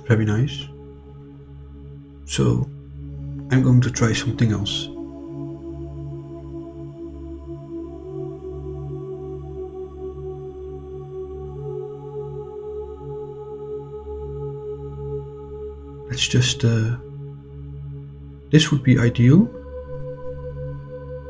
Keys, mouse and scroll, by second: 3.4 click, 7.0 click, 7.9-10.2 drag, 11.0 click, 11.8-14.8 drag, 17.8 click, 18.7 click.